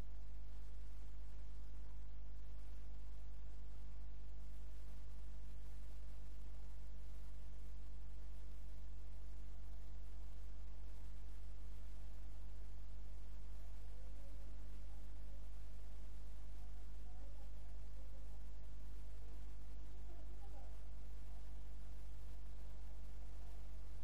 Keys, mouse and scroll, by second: 1.9-3.8 middle drag, 3.8 click, 7.5 click, 12.3 click, 14.5-15.6 middle drag, 17.8-20.6 drag.